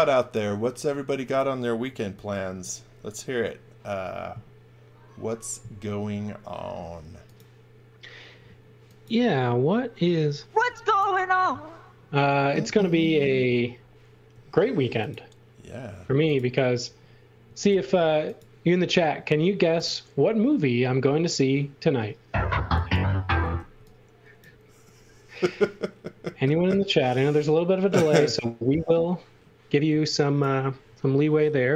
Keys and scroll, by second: 1.8 e, 6.6 m, 10.6 x, 13.3 space, 14.3 m, 17.4 a, 23.5 e, 29.8 x.